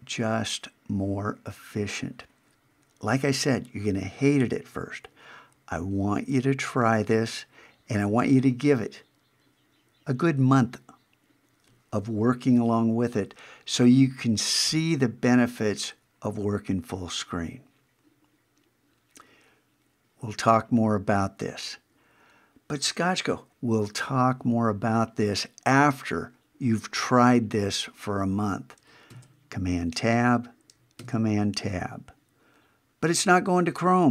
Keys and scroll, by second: 29.1 super+Tab, 31.0 super+Tab.